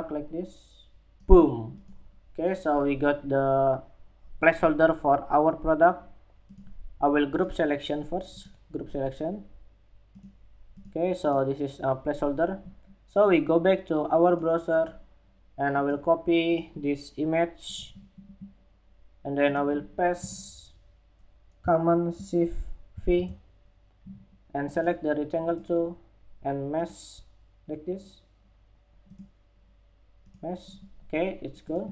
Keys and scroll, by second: 22.4 shift+super+v.